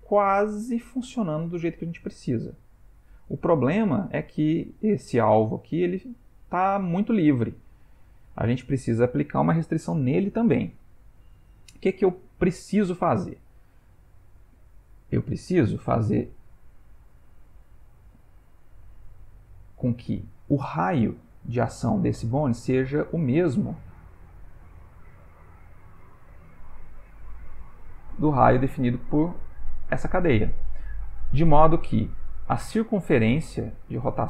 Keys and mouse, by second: 8.7 ctrl+middle click, 12.4 ctrl+middle click, 15.1 click, 17.3 click, 22.8 click, 24.0 click, 25.5 click, 27.7 click, 32.6 click.